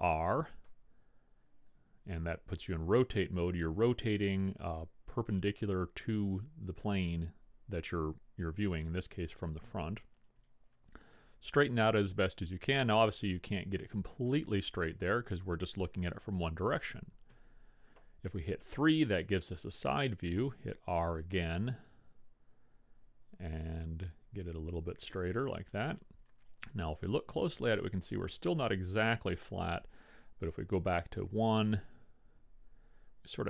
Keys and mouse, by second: 0.0 r, 17.6 KP_3, 20.5 r, 27.2-29.2 middle drag, 29.4 KP_1, 32.5 r.